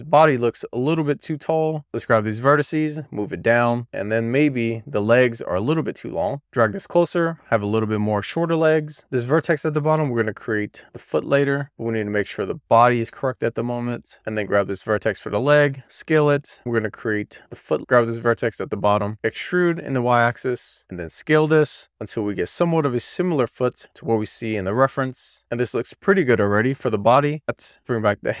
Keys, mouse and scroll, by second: 0.4 alt+z, 0.6 alt+z, 1.0 click, 3.5 scroll up 1, 3.7 shift+scroll down 1, 4.1 alt+z, 5.8 click, 6.3 click, 7.3 alt+z, 7.3 click, 7.8 click, 8.1 alt+z, 8.5 click, 8.9 middle click, 10.2-10.7 scroll up 2, 10.7 alt+middle click, 11.1 alt+scroll down 1, 11.4 alt+scroll up 1, 11.6 click, 12.7 alt+z, 12.8-13.3 scroll up 2, 13.6-14.0 scroll down 1, 14.0 click, 14.6 ctrl+a, 16.5 middle click, 16.8-17.3 scroll up 2, 17.3 alt+middle click, 17.7-18.6 alt+scroll down 1, 18.6 click, 19.0 alt+middle click, 19.2 d, 20.0 y, 20.7 click, 20.8 middle click, 21.0 scroll up 2, 21.2 ctrl+a, 21.4 y, 22.4 middle click, 23.0 scroll down 1, 23.2 ctrl+a, 23.5 z, 24.3 middle click, 25.1 scroll down 3, 25.2 shift+middle click, 25.5-27.0 shift+scroll up 1, 27.0 middle click, 27.3 scroll up 1, 27.5 click.